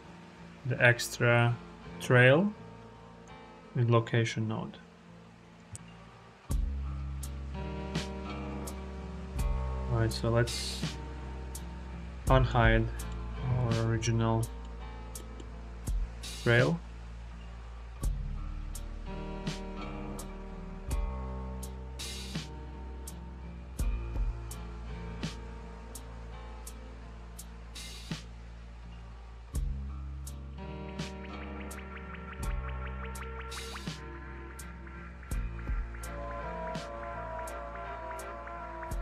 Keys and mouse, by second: 3.1-5.4 drag, 5.7 ctrl+z, 5.9 click, 6.8 click, 8.6-10.4 drag, 12.0 alt+h, 12.6 click, 12.9-13.3 middle drag, 13.4 shift+drag, 14.2 click, 15.0 click, 18.3 click, 23.2 click, 24.5 click, 25.9 click, 26.9 click, 28.5 click, 30.4 click, 30.5-32.8 middle drag, 34.7 Tab, 35.1-36.1 drag, 36.9 click, 38.4 middle click, 38.9 s.